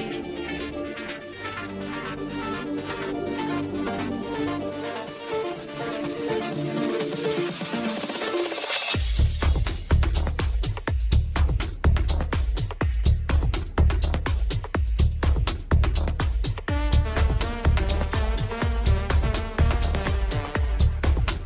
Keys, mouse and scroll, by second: 0.6 click, 1.1 g, 3.1 click, 3.4 scroll down 1, 3.6 shift+middle click, 3.9-4.5 scroll up 2, 4.5-5.2 shift+middle drag, 5.2 scroll down 2, 7.6-10.1 middle drag, 10.1 drag, 11.5-14.6 drag.